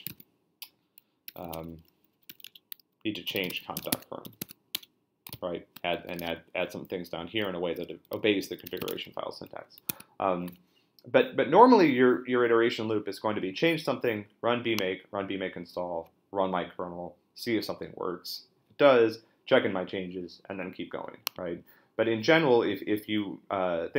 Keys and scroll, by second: 1.0-5.3 typing, 8.7 shift+;, 8.9 Return, 9.9 super+Tab.